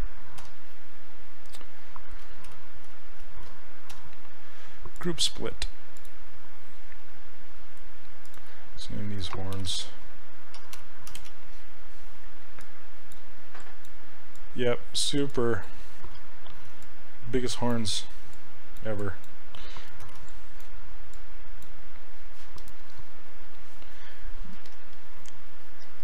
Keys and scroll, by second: 0.4 2, 2.5 shift+f, 9.8-11.6 typing, 20.1 shift+f, 24.6 s.